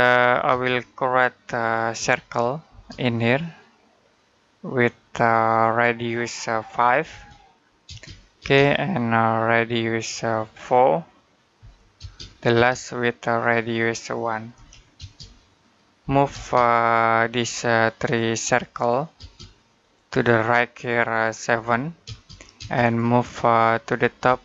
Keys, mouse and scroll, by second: 0.3 space, 1.8 c, 2.5 space, 5.1 click, 6.9 5, 7.7 space, 9.8 click, 11.4 4, 11.8 space, 13.2 click, 14.4 1, 14.8 space, 15.8 m, 16.1 space, 17.2 click, 19.0 space, 19.6 click, 21.3 7, 21.9 space, 22.7 click, 24.1 space, 24.3 click.